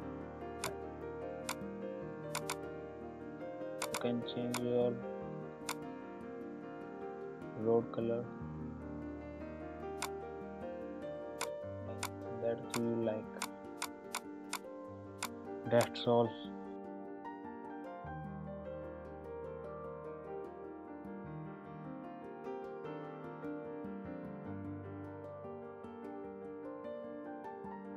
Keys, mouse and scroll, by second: 5.5 click, 9.9 click.